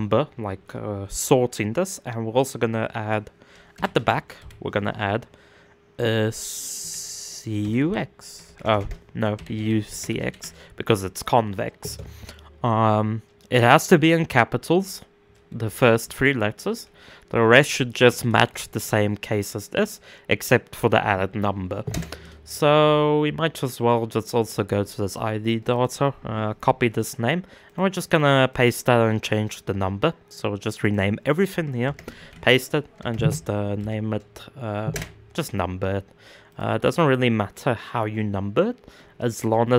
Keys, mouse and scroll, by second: 23.1-27.8 right drag, 27.8 click, 28.1-34.5 right drag, 36.1 click, 36.4-39.7 right drag.